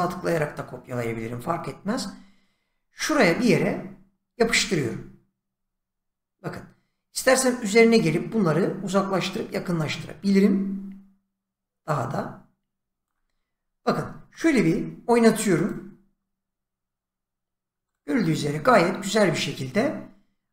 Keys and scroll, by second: 4.4 ctrl+v.